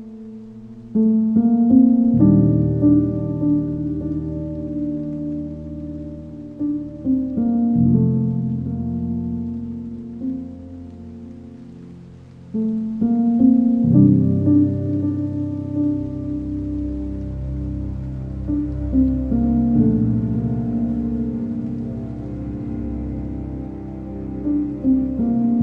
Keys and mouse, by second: 4.2 ctrl+KP_Add, 4.7-6.7 ctrl+KP_Add, 7.1 KP_7, 8.4 shift+d, 9.5-12.8 typing, 13.0 KP_Enter, 15.6 ctrl+z, 17.7-21.6 typing, 19.7 KP_Enter, 21.1 KP_Enter, 24.1 g.